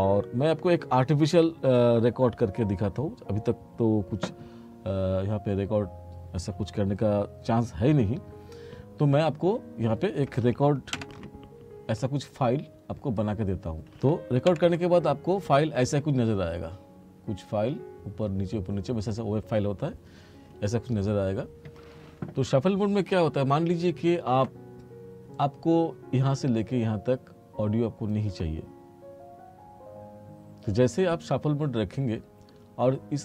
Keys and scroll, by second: 11.0 Page_Down, 14.6 Page_Down.